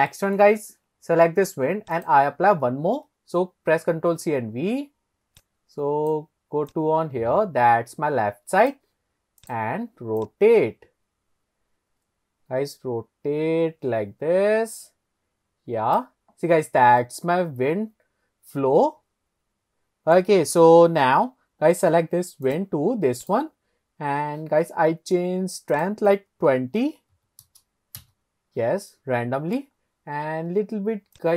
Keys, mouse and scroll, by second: 0.4 middle click, 2.0 click, 3.8 ctrl+c, 4.3 ctrl+v, 5.4 click, 6.7 click, 9.4 click, 10.2 click, 10.5 click, 16.7-17.0 scroll up 1, 17.0-20.2 middle drag, 22.5 click, 23.2 click, 25.8-27.5 drag, 28.9-29.6 middle drag, 29.8 scroll down 2, 31.2 click.